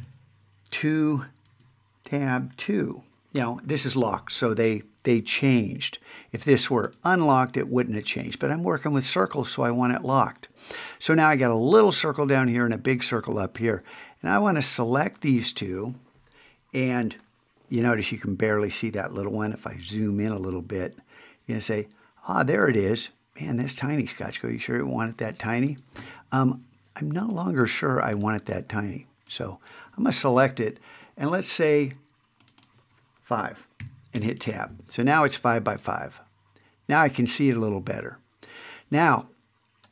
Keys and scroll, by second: 20.2 super+space.